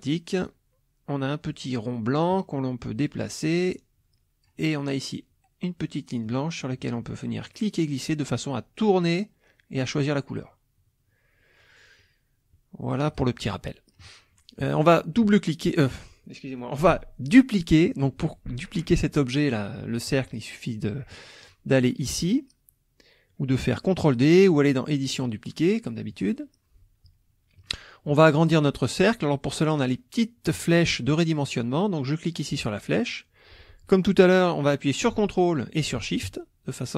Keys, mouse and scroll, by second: 2.3-4.6 drag, 6.2-13.5 drag, 13.7 middle click, 13.9 click, 25.1 click, 26.1 click, 27.6 middle click, 28.1 click, 32.5-36.9 drag.